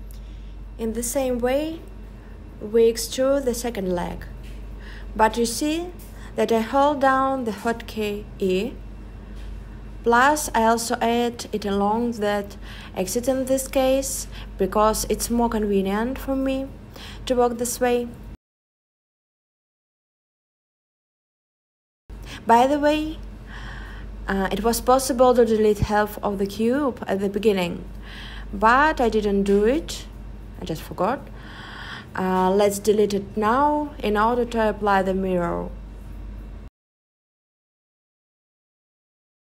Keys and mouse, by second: 0.9 e, 3.2 s, 3.4 z, 3.7 0, 4.9 Return, 8.8 s, 9.7 click, 10.8 e, 14.5 click, 15.1 e, 16.5 click, 16.9 s, 17.9 click, 32.8 click, 33.6-38.5 drag, 38.5-39.4 middle drag.